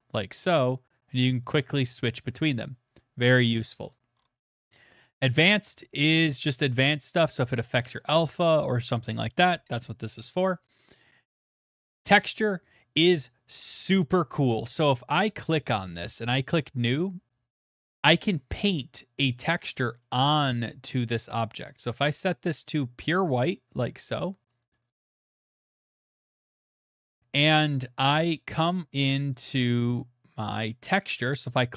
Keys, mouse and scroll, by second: 0.7 click, 1.1 click, 1.5 click, 1.9 click, 2.2 click, 3.9 click, 4.1 middle click, 4.2 middle click, 12.0 click, 12.3 scroll, 15.0 scroll, 15.2 click, 15.5 middle click, 15.7 click, 17.0 click, 19.2 middle click, 20.0 click, 20.4 click, 23.8 click, 24.5 click, 25.0 middle click, 25.2 middle click, 25.5 middle click, 25.7 middle click, 25.7 middle click, 25.9 middle click, 26.2 click, 26.5 middle click, 27.5 click, 30.0 click, 31.5 click.